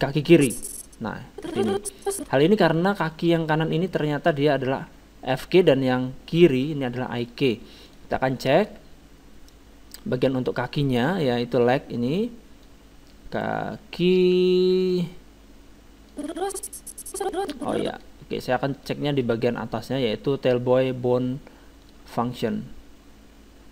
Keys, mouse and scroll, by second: 0.3-2.0 drag, 2.8-4.9 middle drag, 7.8-9.6 drag, 9.4 middle click, 10.2-14.5 drag, 14.0 middle click, 16.1-17.8 drag, 18.7-21.5 drag, 23.3 click.